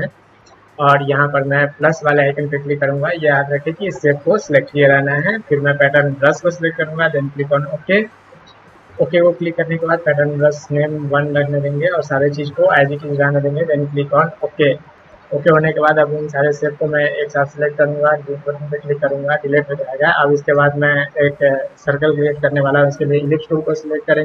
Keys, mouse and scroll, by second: 2.1 click, 5.9 click, 7.3 click, 14.4 click, 15.9-17.1 drag, 17.8 Delete.